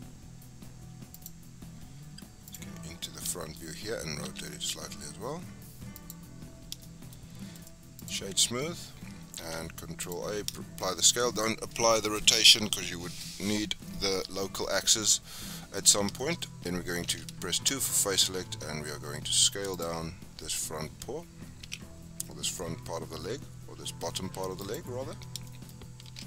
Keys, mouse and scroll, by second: 2.4 click, 2.9-3.3 scroll up 4, 3.3-4.2 shift+middle drag, 4.2 r, 6.4-6.8 scroll up 4, 6.8-7.1 shift+middle drag, 7.1-7.5 scroll up 3, 7.5-9.4 right drag, 9.4 ctrl+a, 10.5-10.9 shift+middle drag, 10.9-14.0 scroll down 2, 15.4-15.7 scroll down 4, 16.2 shift+middle drag, 16.4-16.7 scroll up 3, 16.7 scroll down 5, 17.1 2, 17.4 scroll up 2, 17.7 shift+scroll down 1, 17.7-19.7 shift+middle drag, 19.7 alt+click, 21.6 s, 25.0-25.4 scroll down 6, 25.4 shift+middle click, 25.7 scroll up 3, 26.1 Tab.